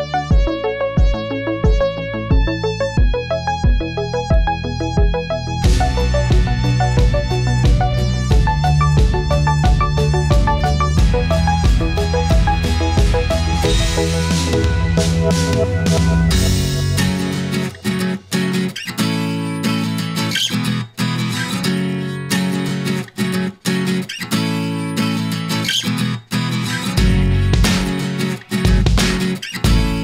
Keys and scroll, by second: 12.5 ctrl+0, 13.8 ctrl+t.